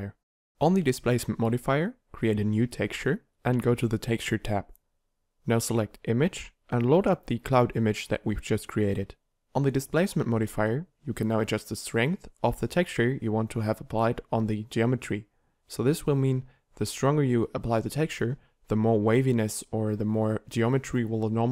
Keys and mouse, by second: 0.0 shift+c, 15.3 middle click, 18.7 ctrl+1, 19.4 ctrl+2.